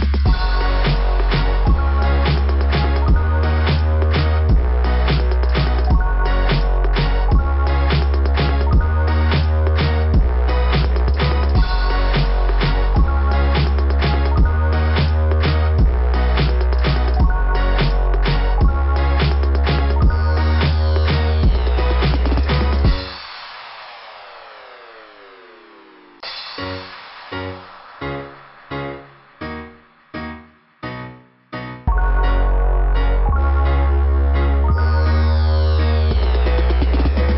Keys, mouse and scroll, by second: 0.3 click, 5.9 click, 7.9 click, 10.2 click, 10.3 click, 11.5 click, 11.6 click, 12.7 click, 12.8 click, 15.6 click, 15.7 click, 17.2 click, 20.9 click, 21.0 click, 21.6 click, 21.7 click, 25.5 click.